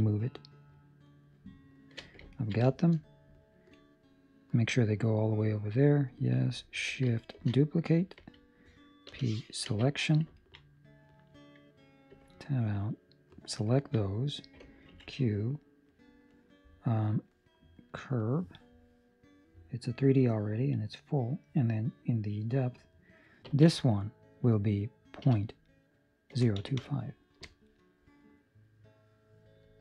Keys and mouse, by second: 2.3 ctrl+middle click, 2.9 shift+middle click, 2.9 middle click, 3.7 middle click, 3.7 shift+middle click, 5.4 middle click, 7.3 shift+d, 9.0 p, 10.3 ctrl+middle click, 10.6 middle click, 12.1 Tab, 12.9 right click, 13.6 ctrl+middle click, 14.1 middle click, 14.8 q, 19.2 middle click, 22.7 middle click, 22.7 click.